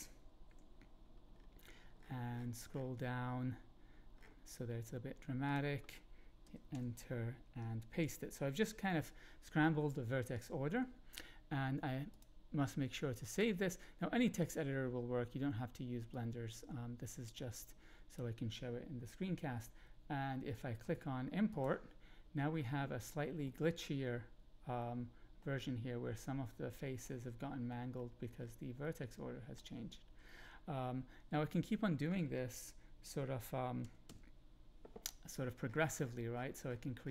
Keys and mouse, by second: 0.4 Delete, 5.4 click, 6.4 Return, 6.7 Up, 8.0 ctrl+v, 12.1-13.4 drag, 16.1-18.1 drag, 21.6-22.2 drag, 22.6-23.1 middle drag, 23.4 middle click, 24.8 middle click, 27.0-27.9 shift+middle drag, 28.8-29.5 middle drag, 33.8 Right, 34.0 Right.